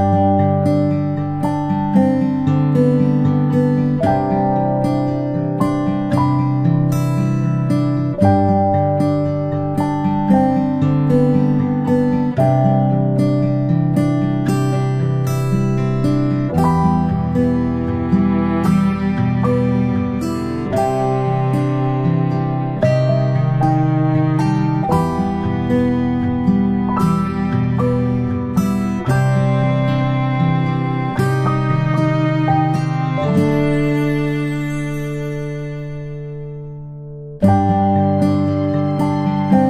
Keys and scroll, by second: 0.0-0.5 ctrl+space, 2.3 ctrl+space, 3.3 ctrl+space, 4.9 space, 5.1 space, 5.2 space, 5.3 space, 13.1 ctrl+space, 13.3 ctrl+space, 13.4 ctrl+space, 13.8 p, 20.7 space, 20.8 v, 22.6 ctrl+z, 23.1 ctrl+z, 23.8 p, 27.7-28.1 space, 32.3 ctrl+space, 33.1 ctrl+space, 33.5 ctrl+z, 33.7 ctrl+z, 35.1 space, 35.4 space.